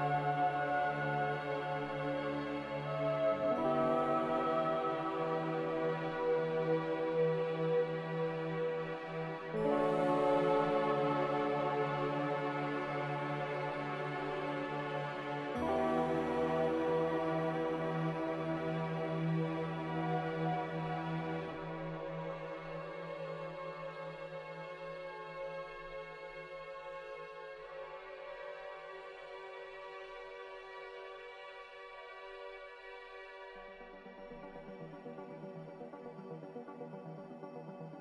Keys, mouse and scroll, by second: 0.0-1.7 typing, 4.1 z.